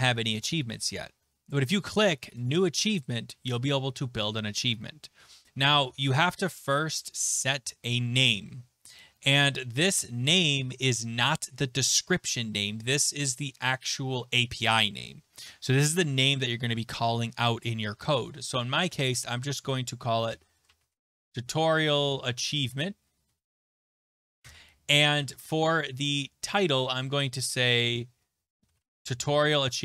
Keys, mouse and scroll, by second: 6.5 click, 20.0-24.6 typing, 26.1 click, 27.1 ctrl+a, 28.2-29.8 typing, 29.4 click.